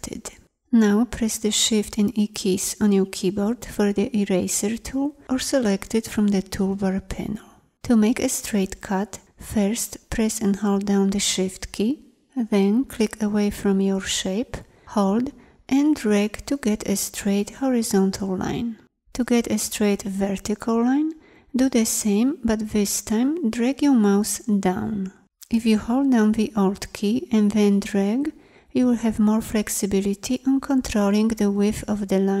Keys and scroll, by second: 1.5 shift+e.